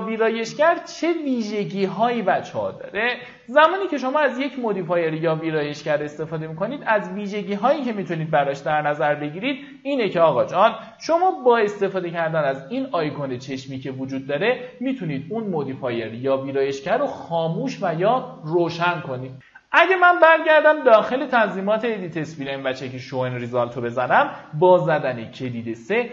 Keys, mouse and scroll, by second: 0.7-2.4 shift+drag, 3.6 click, 7.6 middle click, 8.9 ctrl+w, 11.0 q, 12.4 click, 19.6 alt+middle click, 20.0-22.8 drag, 23.0 middle click, 24.1 middle click, 24.6 click, 25.7 w.